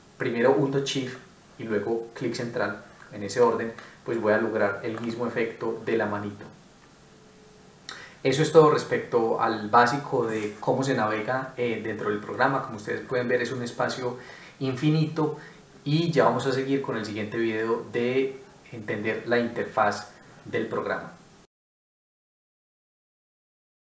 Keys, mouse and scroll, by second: 1.0 shift+middle click, 12.3 middle click.